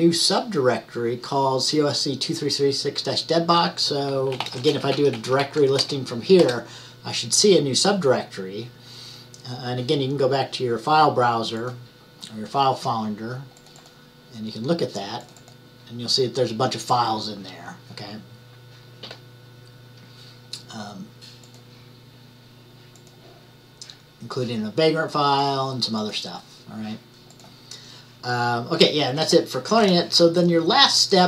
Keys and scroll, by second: 4.2-6.0 typing.